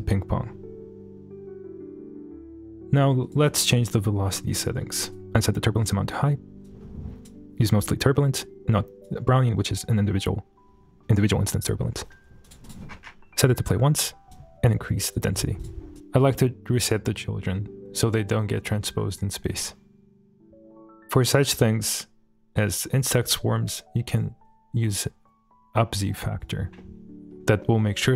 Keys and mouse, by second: 3.2-4.5 drag, 5.1-5.9 drag, 6.6 click, 7.8-9.0 drag, 9.5-11.3 drag, 11.8 shift+middle click, 12.6 click, 13.5 click, 13.8 shift+middle click, 14.3 click, 15.1 click, 15.6 click, 18.8 space, 24.2-26.4 drag, 26.8-27.3 middle drag.